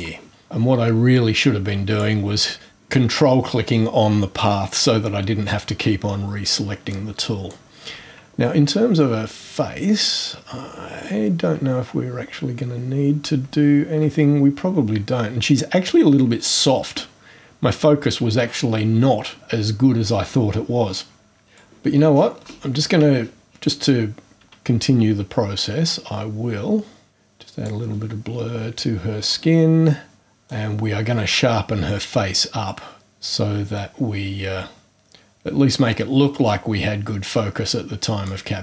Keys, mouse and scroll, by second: 0.4-2.2 drag, 6.9-7.7 drag, 8.2 scroll up 2, 10.1 scroll up 1, 10.3 scroll down 1, 10.4-10.8 scroll up 1, 12.2-13.3 ctrl+scroll up 2, 21.5 click, 22.1-22.4 scroll down 2, 23.2-23.7 scroll down 2, 25.1-25.5 scroll up 2, 25.9-27.8 drag, 29.2 click, 30.4-38.4 drag.